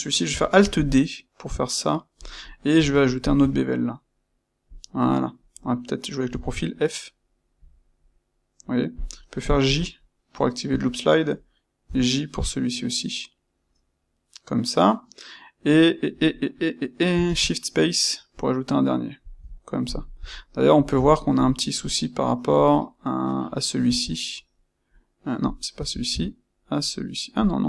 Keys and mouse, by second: 0.5 alt+d, 2.2 click, 2.6 space, 3.3 space, 19.7-27.6 shift+middle drag.